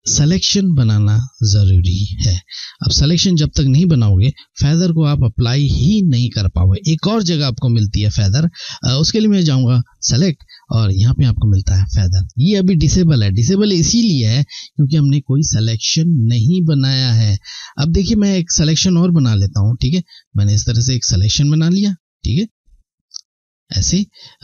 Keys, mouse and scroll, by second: 9.6 click, 14.6 click, 19.5 click, 20.2 shift+click.